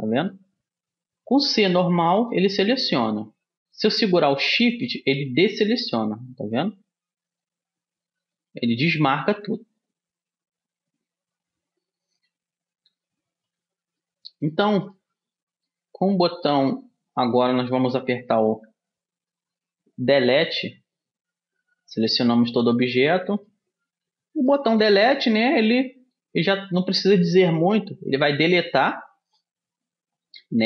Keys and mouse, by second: 1.7 c, 14.1-19.9 middle drag, 21.1 Tab, 23.0-24.7 middle drag, 24.6 Delete.